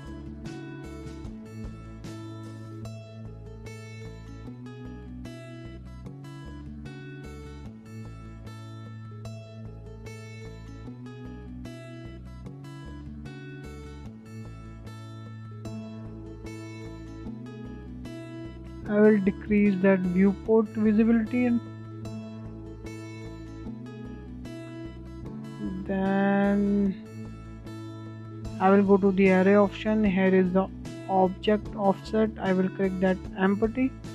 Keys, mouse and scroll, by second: 0.1-0.4 scroll up 2, 0.4-2.8 shift+middle drag, 2.8 click, 3.5 click, 5.6-8.6 drag, 9.2 scroll down 1, 9.5 middle click, 9.7-10.0 scroll up 2, 10.0 shift+middle drag, 10.3 scroll down 2, 10.5-12.5 middle drag, 12.5 click, 12.9 click, 14.7 click, 17.2-19.2 drag, 19.2-19.5 scroll down 2, 19.5 middle click, 19.8-20.1 scroll up 3, 20.1-20.4 shift+middle drag, 20.5 scroll up 1, 20.7-22.6 shift+middle drag, 22.6 scroll down 1, 22.7-23.3 middle drag, 23.3 scroll down 2, 23.6-24.8 shift+middle drag, 24.8 click, 25.8 click, 26.2-26.5 scroll down 1, 26.5-26.9 shift+middle drag, 26.9-27.4 scroll up 1, 28.3 click, 30.4 click, 31.4-33.6 drag, 33.6-33.9 scroll down 2, 33.9-34.1 middle drag.